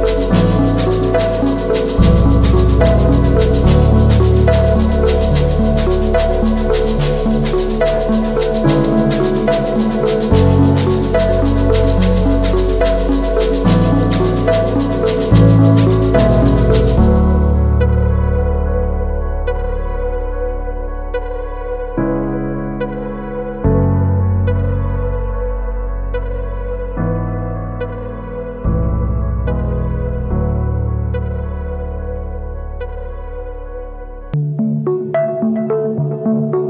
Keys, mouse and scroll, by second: 4.4 typing, 32.2-34.1 typing, 34.8 double click, 35.6-36.3 typing.